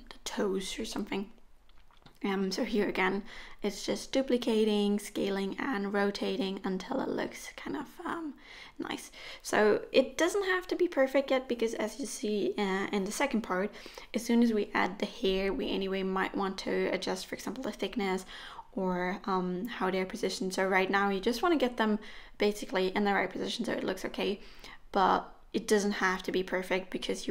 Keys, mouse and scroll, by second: 0.5-1.1 scroll up 1, 0.5 s, 1.6 middle click, 2.5 middle click, 4.2 g, 5.1 middle click, 5.4 r, 6.3 middle click, 7.3 KP_1, 7.7 shift+d, 8.5 shift+d, 9.5 middle click, 10.1 middle click, 10.4 r, 11.1 g, 12.2 r, 13.7 middle click, 14.4 g, 15.0 middle click, 15.3 click, 15.6 r, 16.3 g, 17.7 r, 18.5 f, 19.4 ctrl+z, 20.0 r, 20.9 g, 21.7 middle click, 21.9 click, 22.1 scroll down 3, 22.1 middle click, 23.0 click, 23.4 g, 24.7 g, 25.6 g, 26.7 middle click, 26.7-27.3 scroll up 4, 27.2 click.